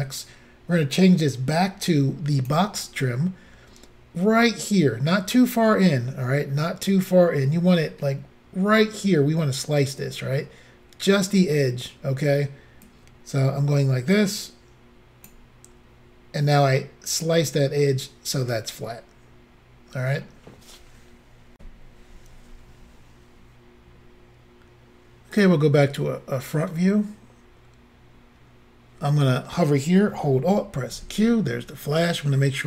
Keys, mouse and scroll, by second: 0.9 click, 12.9 click, 17.5 middle click, 21.6 Insert, 25.3 click, 30.9 alt+q.